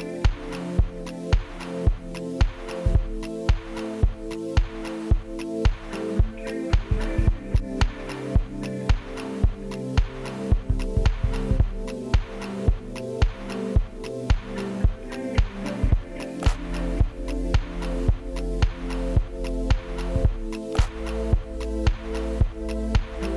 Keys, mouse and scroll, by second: 0.3 middle click, 0.7-1.1 scroll down 5, 1.1 middle click, 1.2 m, 2.1 scroll up 5, 3.2 y, 3.7 shift+click, 3.9-4.5 scroll down 7, 4.1 shift+middle click, 4.3 m, 4.5 ctrl+click, 5.0 shift+click, 5.1 middle click, 5.3 middle click, 5.3 s, 6.0 Return, 6.0 1, 8.2-8.5 scroll up 4, 8.5 m, 8.8 space, 8.9 m, 9.2-9.5 scroll up 5, 9.7 shift+click, 9.9 space, 9.9-10.4 scroll down 19, 10.4 middle click, 10.5 shift+middle click, 10.9 scroll down 1, 11.0 y, 11.2 middle click, 12.2 middle click, 12.9 scroll down 3, 13.0 middle click, 13.1-13.5 scroll up 7, 13.7 ctrl+click, 13.9 double click, 14.2 middle click, 14.3 ctrl+z, 14.6 middle click, 14.7 space, 15.0 m, 16.1 typing, 16.5-17.2 scroll up 15, 17.2-17.6 scroll down 19, 18.6 middle click, 19.3 scroll down 7, 19.6 scroll, 19.8 ctrl+middle click, 20.5 scroll up 7, 21.2 shift+click, 21.3 scroll down 13, 21.5 ctrl+z, 21.8 space, 22.1 Delete.